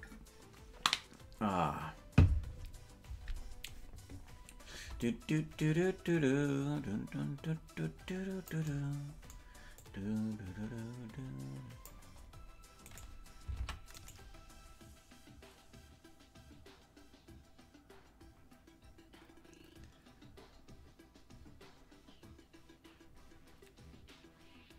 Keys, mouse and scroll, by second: 5.0-8.5 drag, 9.8-11.9 drag, 13.0 right click, 13.6 ctrl+Tab, 14.0 right click.